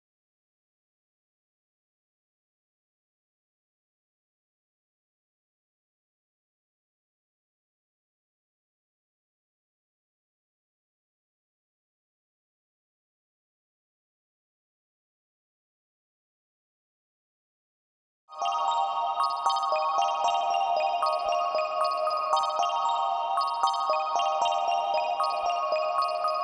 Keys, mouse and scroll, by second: 4.6-11.3 drag, 14.4-22.0 drag, 22.9-26.4 drag.